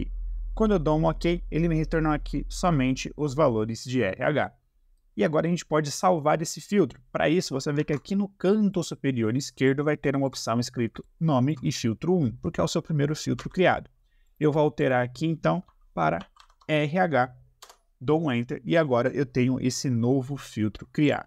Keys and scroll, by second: 7.9 ctrl+`, 13.3 Escape, 16.1 shift+r, 16.3 shift+h, 17.6 Return.